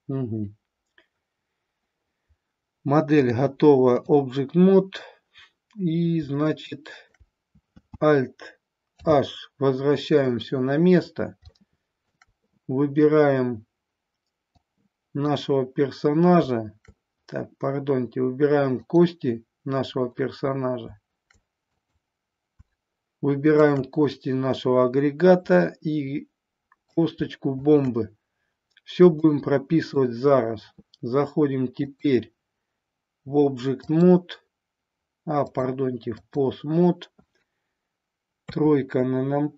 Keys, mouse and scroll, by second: 3.2-4.0 drag, 6.4-7.0 shift+middle drag, 8.9 alt+h, 11.5-12.2 shift+middle drag, 14.5-15.3 drag, 21.7 click, 25.7-27.0 middle drag, 29.2-29.9 middle drag, 31.9-34.0 drag, 35.4-36.4 drag, 38.3 KP_3.